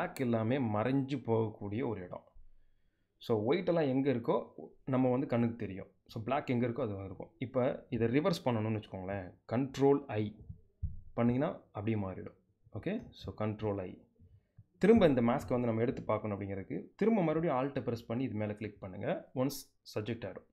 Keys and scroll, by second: 9.9 super+i, 12.7 super+i.